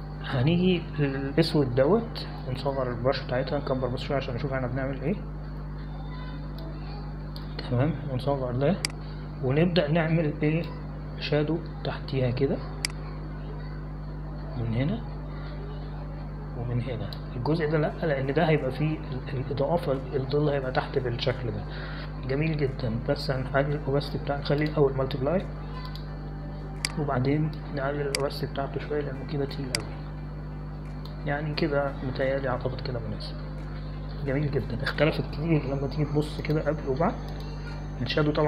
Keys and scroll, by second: 4.5-6.7 typing, 8.5 space, 10.1 [, 10.3 [, 10.5 [, 35.1 ctrl+0.